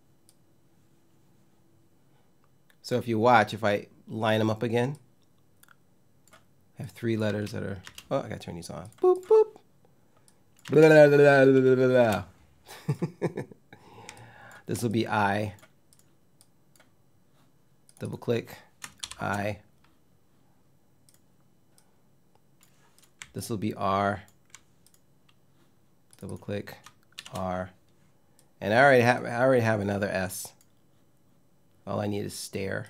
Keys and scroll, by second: 6.9 space, 10.3 space, 11.7 space, 18.7 shift+i.